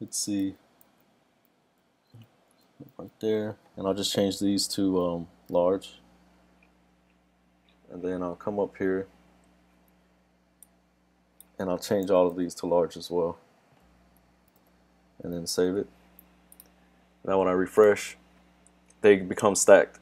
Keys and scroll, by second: 12.1 super+d, 15.6 super+s.